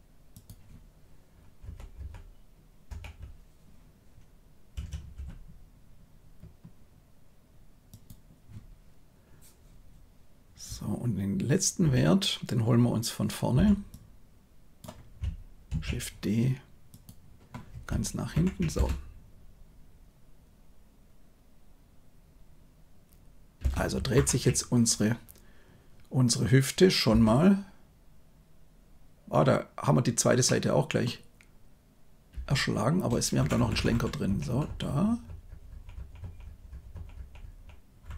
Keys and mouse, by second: 1.6 Right, 1.9 Right, 2.8 Right, 4.7 r, 13.5 b, 15.6 shift+d, 18.3 shift+Left, 18.7 space, 23.5 space, 24.1 shift+Left, 27.0 space, 30.4-31.0 middle drag, 32.3 space, 33.3 Left, 33.5 Left, 33.7 Left, 33.9 Left, 34.2 Right, 34.4 Right, 34.6 Right, 34.8 Right, 35.0 Right, 35.2 Right, 35.7 Right, 35.9 Right, 36.1 Right, 36.4 Right, 36.6 Right, 36.9 Right, 37.1 Right, 37.4 Right, 38.0 Left.